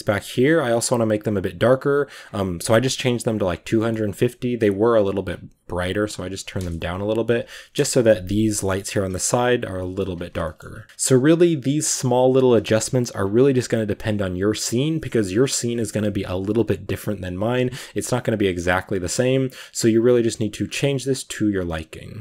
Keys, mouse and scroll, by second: 0.4 z, 1.2-3.3 right drag, 3.3 click, 3.5 scroll down 2, 3.6 middle click, 4.5 right click, 5.0 scroll up 1, 5.1 scroll down 1, 6.7 a, 7.3 z, 7.6 KP_0, 8.3-8.8 scroll down 2, 8.5 shift+middle click, 9.6 shift+middle drag, 9.9 scroll up 1, 10.0 ctrl+s, 10.3 shift+middle drag, 10.6 scroll up 2, 10.8 shift+click, 10.9 a, 11.3 a, 12.0 right click, 13.1-16.0 shift+drag, 16.0-16.8 scroll up 1, 16.9 right click, 18.3-19.7 drag, 19.7 right click, 20.5-22.2 drag.